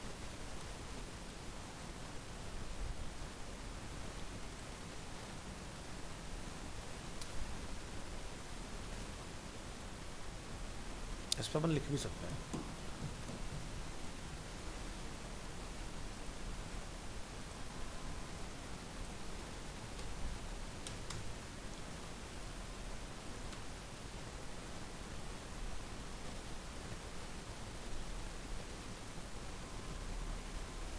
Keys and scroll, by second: 22.6 ctrl+v.